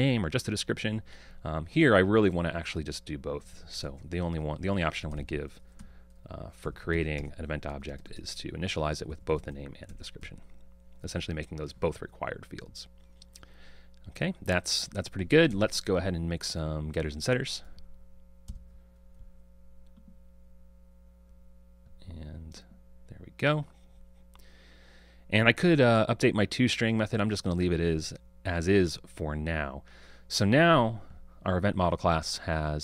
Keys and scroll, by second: 7.3 Return, 18.6 super+n.